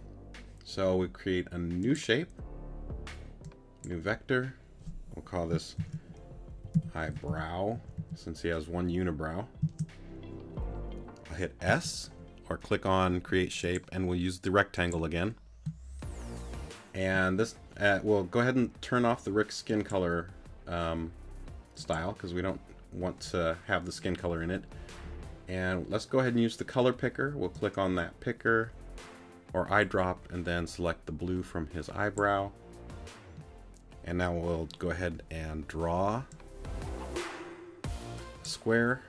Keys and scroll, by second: 9.6 Return, 11.7 s.